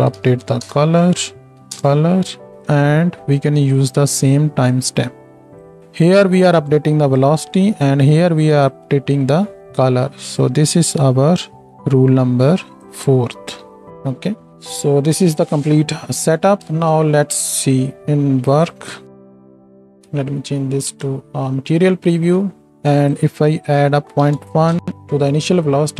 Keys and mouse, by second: 2.5-7.2 drag, 3.8-5.8 middle drag, 3.8-5.8 right drag, 7.2-10.4 middle drag, 7.2-10.4 right drag, 10.4-11.7 ctrl+drag, 11.5 ctrl+j, 13.5 F2, 16.7 ctrl+space, 16.7-20.0 drag, 16.7-20.0 middle drag, 16.7-20.0 right drag, 20.0 z, 24.5-25.9 shift+drag, 24.5-25.9 shift+middle drag, 24.5-25.9 shift+right drag, 24.7 shift+Left, 25.8 space.